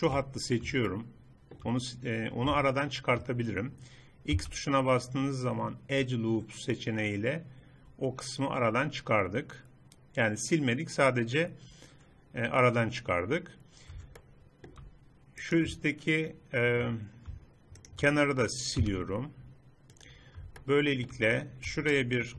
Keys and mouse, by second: 0.0-1.0 drag, 1.0 middle click, 4.4 x, 7.7-9.6 middle drag, 14.3 click, 16.4 right click, 17.3 middle click, 17.9-19.8 right drag, 19.8 x, 20.7 middle click.